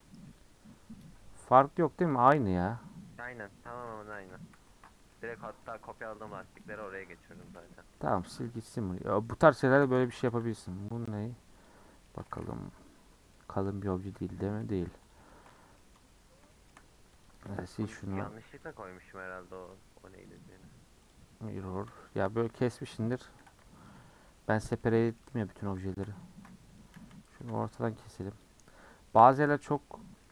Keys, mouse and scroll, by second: 0.2-3.2 middle drag, 4.1 ctrl+z, 4.5 ctrl+z, 5.1-6.8 middle drag, 6.8 click, 7.2 click, 7.6 x, 8.0 shift+middle drag, 8.2 scroll down 1, 8.4-9.7 middle drag, 9.7 click, 9.9 Tab, 10.2 a, 11.6 u, 12.0 middle click, 12.9 KP_Decimal, 13.4 middle click, 14.0 Tab, 14.4-15.1 scroll down 4, 14.5 h, 15.1 click, 15.3-16.0 shift+middle drag, 16.0-16.5 scroll down 3, 16.5-17.2 shift+middle drag, 17.2 click, 17.5 x, 18.0 click, 18.7 click, 21.5 middle click, 22.0 Tab, 22.3-23.9 scroll up 1, 23.9 alt+click, 24.5 KP_Decimal, 24.8-26.3 middle drag, 26.3 ctrl+r, 27.4 a, 28.4 u, 29.6-30.3 middle drag.